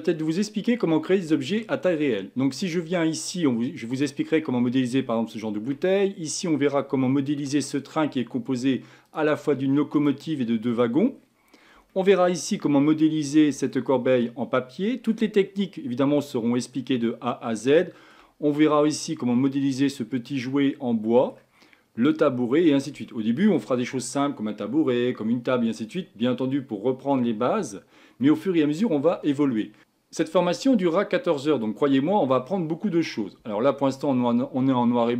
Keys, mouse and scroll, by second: 2.3-3.2 scroll up 10, 3.9 click, 5.2-5.9 shift+middle drag, 5.9-7.1 scroll up 5, 7.1-9.1 shift+middle drag, 9.1 click, 10.0 click, 10.7 click, 11.2-11.9 scroll down 10, 11.9-12.5 shift+middle drag, 12.5-13.7 scroll up 8, 13.7-15.7 shift+middle drag, 15.7-16.2 scroll down 1, 16.2-17.1 middle drag, 17.1-17.8 scroll up 3, 17.8-18.5 shift+middle drag, 18.5-20.0 scroll up 3, 20.0-20.3 scroll down 2, 20.3-21.6 middle drag, 21.6-22.4 scroll down 4, 22.4-23.1 scroll down 5, 23.1-26.1 shift+middle drag, 28.3-31.6 middle drag, 31.8-34.8 middle drag.